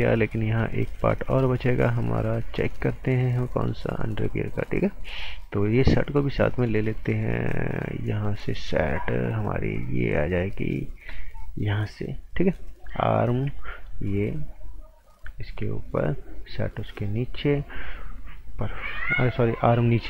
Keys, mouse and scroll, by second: 3.3 click, 12.6 click, 13.7 shift+click, 19.9 ctrl+Num_Lock.